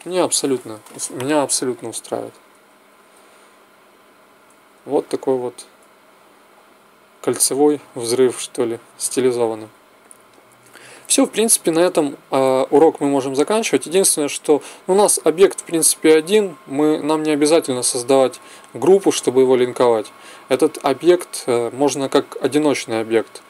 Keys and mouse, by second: 0.6 Escape, 1.1 alt+a, 2.5 Escape, 3.0 alt+a, 4.4 Escape, 4.9 alt+a, 7.0 Escape, 7.6 alt+a, 8.8 Escape, 13.6 click.